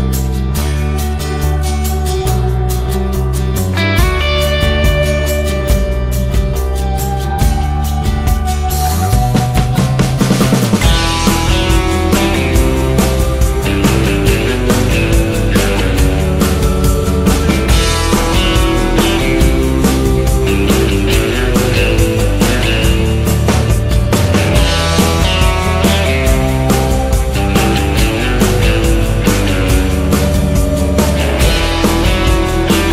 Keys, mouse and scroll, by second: 0.6 click, 1.0 click, 4.4 click, 9.9 KP_0, 15.1 click, 16.0 click, 18.4-20.4 typing, 19.6 Tab, 22.1 click, 22.4 Tab, 22.4 s, 23.5 r, 24.6 click, 25.0 Tab, 25.8 KP_Subtract, 25.9 KP_0, 26.1 KP_0, 27.2 click, 27.7 click, 29.7 KP_0, 32.6 KP_0.